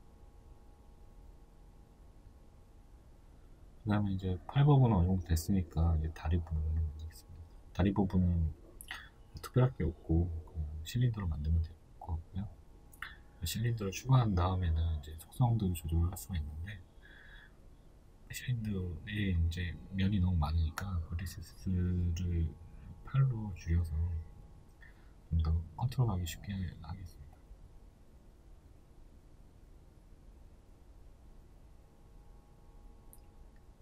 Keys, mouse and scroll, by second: 0.6-1.0 scroll down 2, 1.3-1.8 scroll up 2, 2.5 click, 4.2 shift+middle click, 4.8 click, 8.5 shift+a, 9.1-18.8 shift+middle drag, 18.9 Return, 20.2-28.6 shift+middle drag, 20.7-23.9 scroll, 24.7 scroll, 25.4 scroll, 26.4 s, 28.6 click, 28.9-30.7 shift+middle drag, 29.2 scroll, 30.7 scroll, 31.0-33.8 shift+middle drag, 31.7 s.